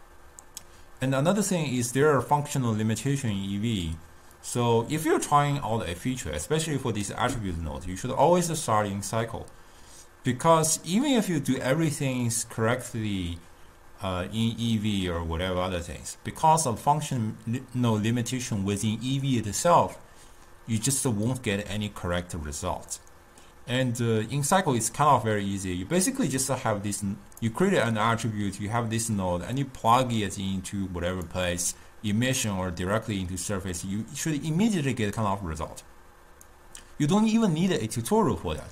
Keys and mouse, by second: 4.5 click, 26.5-30.3 drag, 35.6-38.7 drag.